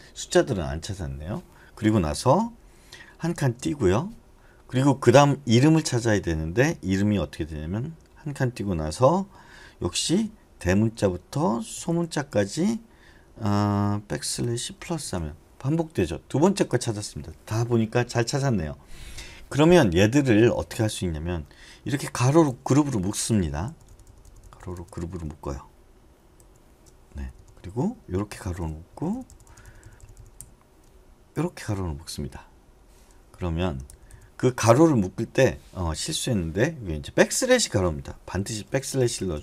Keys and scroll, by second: 3.3 space, 10.0-12.4 typing, 14.1-14.8 typing, 21.9 typing, 23.4 Left, 23.7 Left, 23.8 Left, 24.0 Left, 24.2 Left, 24.6 Left, 24.7 Left, 26.4 shift+9, 27.1 Left, 27.3 Left, 28.3 shift+0, 29.1 Left, 29.6 Left, 29.8 Left, 30.0 Left, 30.1 Left, 31.3 (, 33.3 Right, 33.9 Left, 34.1 Left, 38.6 ₩, 39.0 Right, 39.2 Right, 39.3 Right.